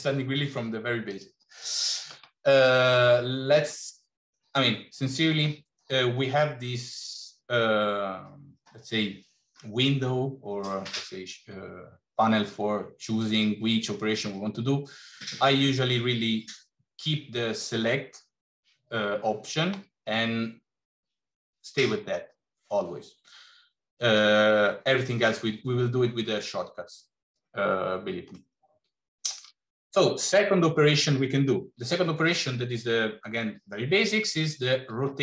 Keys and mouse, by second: 1.0 click, 28.3-29.3 middle drag.